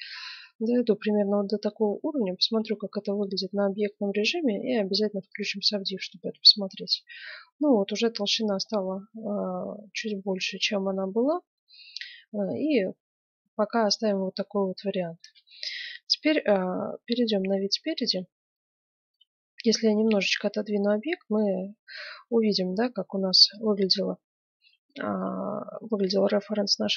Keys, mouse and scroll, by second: 1.9 Tab, 5.3-7.3 drag, 6.3-8.1 middle drag, 8.6-11.1 middle drag, 14.0-16.3 middle drag, 14.0-14.5 scroll up 1, 16.8 KP_1, 18.7 click, 19.0-20.2 middle drag, 19.9 g, 20.2 click, 24.1-26.6 middle drag.